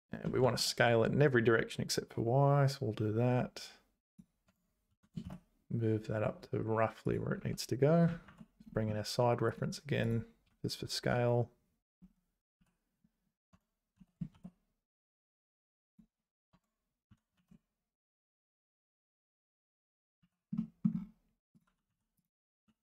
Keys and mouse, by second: 4.5 Tab, 4.9 g, 7.4 `, 8.3 alt+h, 10.5 `, 12.6 z, 13.5 Tab, 14.0 s, 16.5 Tab, 17.1 g, 20.6 z, 20.7 middle click, 21.9 h, 22.6 h.